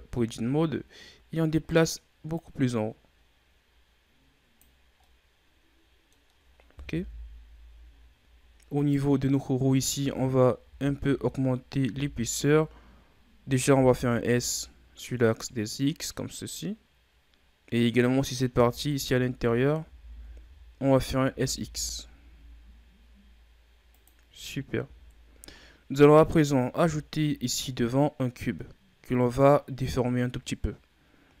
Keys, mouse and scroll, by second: 2.3-4.9 drag, 4.9-6.9 middle drag, 6.9 KP_1, 7.9 shift+scroll down 3, 8.3 scroll up 2, 8.7 right click, 9.8 Tab, 10.6 a, 11.0 a, 11.8 a, 13.3 s, 17.6-18.2 scroll up 2, 18.5 Tab, 18.8 right click, 19.3 Tab, 19.7 a, 20.0 a, 20.3 a, 21.2 s, 24.3 Tab, 24.7 a, 24.9-26.8 scroll down 10, 26.8-27.5 shift+scroll up 5, 31.0-31.4 scroll down 1.